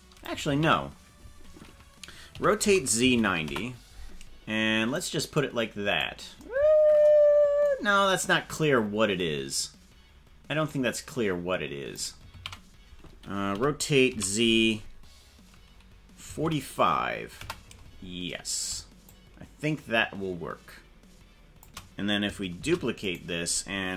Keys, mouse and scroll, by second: 0.7 ctrl+z, 2.3 r, 5.1-6.1 drag, 10.7-12.1 drag, 12.5 ctrl+z, 13.5 r, 19.0-21.6 shift+drag, 22.7 shift+d.